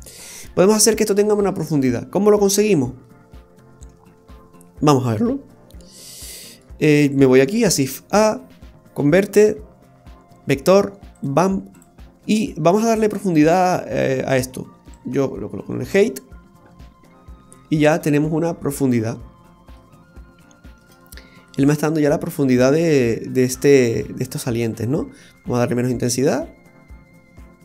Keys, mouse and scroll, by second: 0.4 middle click, 0.4-0.7 scroll up 2, 1.3-2.6 scroll down 5, 2.6 middle click, 5.4 scroll down 1, 6.0 middle click, 6.0 scroll down 3, 7.6 shift+a, 11.8 typing, 12.2 middle click, 14.9 click, 17.5 scroll down 2, 17.8 middle click, 19.9-20.4 scroll up 3, 20.4 shift+middle click, 21.0 middle click, 26.1 click.